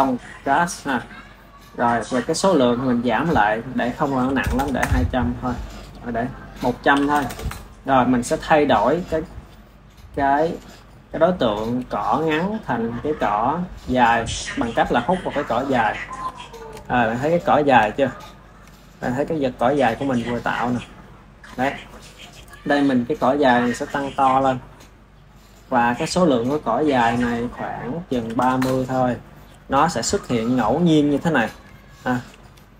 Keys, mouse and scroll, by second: 2.7-4.4 drag, 4.4 KP_0, 6.1 click, 7.1 KP_0, 9.7-12.8 middle drag, 12.8 click, 13.6 click, 15.7 click, 16.3-23.2 shift+middle drag, 23.6-25.6 drag, 25.6-27.1 middle drag, 27.1-30.0 drag, 30.0 KP_1, 30.6 click, 32.0 ctrl+s.